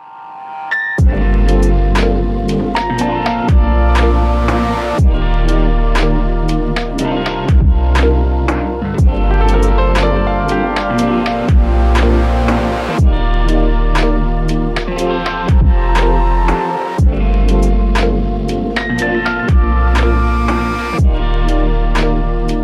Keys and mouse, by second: 1.1 double click, 8.2 double click, 18.4 double click, 22.4 alt+click.